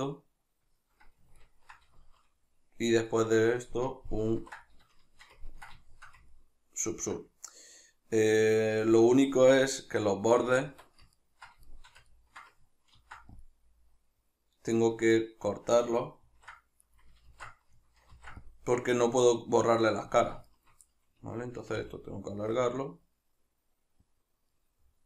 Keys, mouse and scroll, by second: 1.4-10.3 ctrl+middle drag, 4.4 ctrl+2, 11.2-13.0 ctrl+middle drag, 13.0 ctrl+r, 14.9 right click, 16.3 ctrl+r, 17.0 right click, 17.3 ctrl+z, 20.3 click, 20.5 shift+right click, 20.9-24.3 middle drag, 21.8 g, 24.3 click, 24.5-25.0 middle drag.